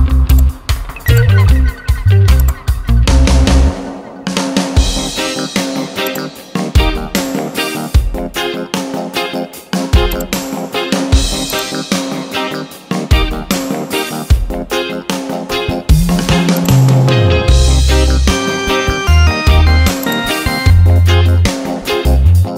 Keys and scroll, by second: 15.0 ctrl+t, 18.0 Return, 21.6 ctrl+a.